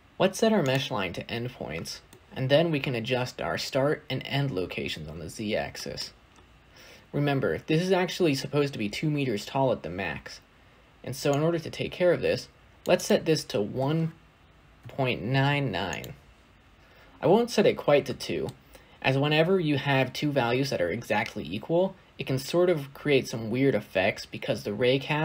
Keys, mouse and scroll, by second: 0.6-2.0 drag, 2.0-4.6 middle drag, 4.6 scroll up 4, 5.6-11.3 shift+middle drag, 11.3-15.8 drag, 15.8 9, 16.9-18.0 scroll down 2, 18.0-18.4 shift+middle drag, 18.4-25.2 scroll up 2.